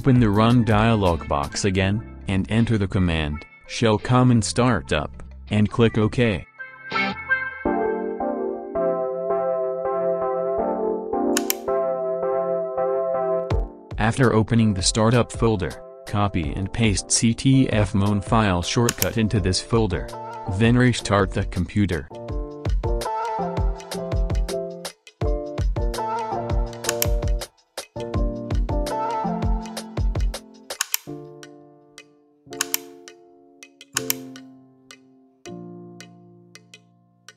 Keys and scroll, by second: 1.8-3.0 typing, 4.3-8.9 typing, 11.3 Return, 19.6 ctrl+c, 23.7 ctrl+v.